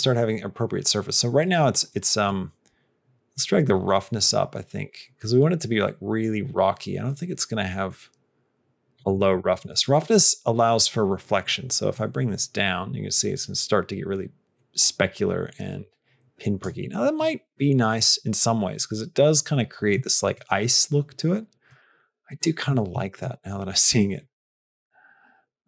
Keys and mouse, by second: 2.2-5.2 drag, 7.9-9.0 drag, 9.7 shift+middle click, 11.9-16.6 drag, 19.9 shift+middle click, 21.6 shift+middle click, 22.3 shift+middle click, 22.9 shift+middle click, 24.3-25.6 drag.